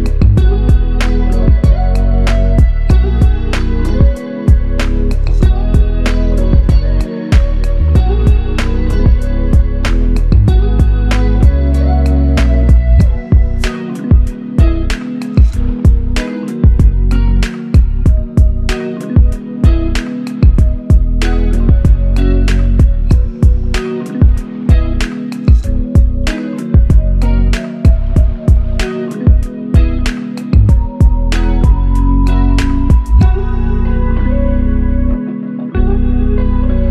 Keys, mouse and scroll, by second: 0.9 double click, 8.5 alt+click, 11.2 double click, 12.1 alt+click, 13.3 double click, 17.2 alt+click, 18.5 double click, 21.7 double click, 22.7 alt+click, 23.8 double click, 26.7 alt+click, 27.9 double click, 28.5 alt+click, 29.6 double click, 32.4 alt+click, 33.5 alt+click, 33.7 alt+shift+click, 34.7 alt+click.